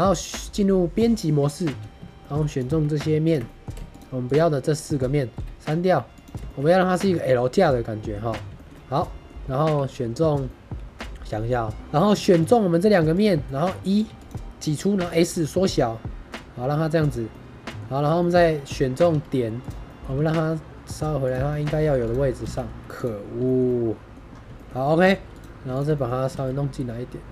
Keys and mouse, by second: 1.5 middle click, 1.9 3, 2.1 middle click, 3.3 middle click, 3.8 shift+click, 4.1 shift+click, 4.4 middle click, 6.4 shift+middle click, 6.5-8.0 middle drag, 8.4 shift+middle click, 8.6 middle click, 9.7 2, 10.4 middle click, 11.7 ctrl+z, 12.1 2, 12.4 click, 13.4 click, 14.0 e, 14.1 click, 14.9 s, 16.9 click, 17.3-17.7 drag, 17.9 click, 18.1 shift+drag, 18.5 middle click, 19.0 1, 19.8 middle click, 20.0 g, 20.0 z, 21.1 click, 21.4 shift+middle click, 22.3 g, 22.6 y, 23.4 shift+middle drag, 23.6-24.0 middle drag, 24.5 middle drag, 24.6 middle click, 24.9 2, 25.3 click, 25.9 middle click, 26.2 g.